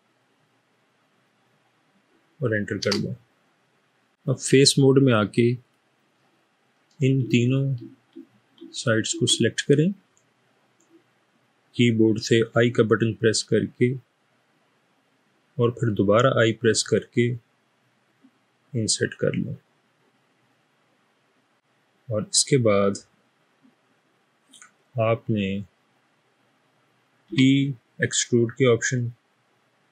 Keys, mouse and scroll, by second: 2.8 Return, 5.6 click, 7.4 shift+click, 8.7 shift+click, 12.4 i, 16.5 typing, 27.3 e.